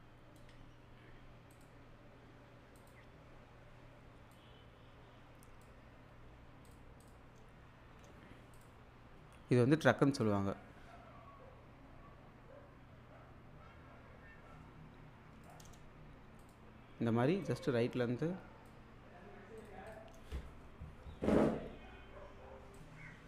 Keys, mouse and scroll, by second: 2.9 click, 4.3-5.8 drag, 8.6 click, 15.4-18.7 drag, 22.7 click.